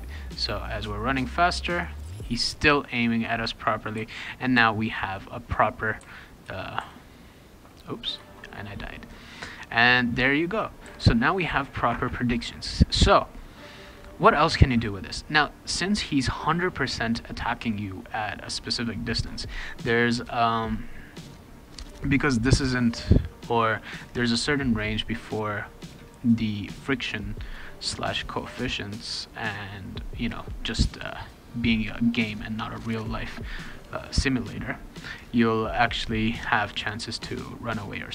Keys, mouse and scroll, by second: 1.4 click, 3.9 w, 4.5 s, 4.7-6.1 right drag, 5.4 click, 6.0 d, 6.8 s, 9.6 click, 10.8 r, 23.7 click, 25.2 click, 25.8 click.